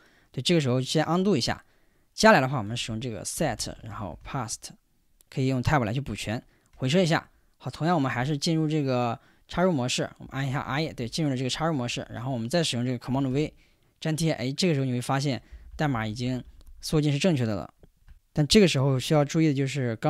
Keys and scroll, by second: 2.7-4.6 typing, 6.7 Return, 8.1 i, 10.2-12.2 typing, 13.3 super+v, 15.2 Escape, 15.2-17.3 typing.